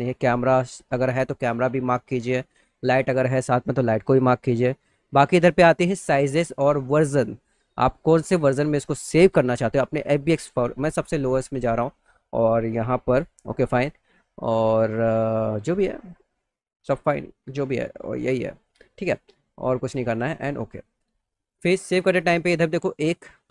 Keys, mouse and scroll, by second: 2.2 click, 8.0 click, 9.2 click, 11.0 click, 13.9 click, 16.0 click, 16.7 click, 17.7 click, 20.2 click.